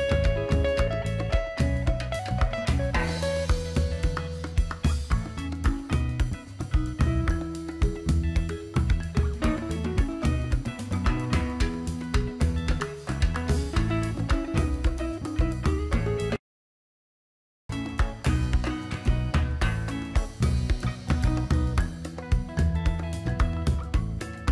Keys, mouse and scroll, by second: 1.5 alt+Num_Lock, 1.5 alt+scroll down 1, 2.4 click, 19.5 click, 19.8-22.0 typing.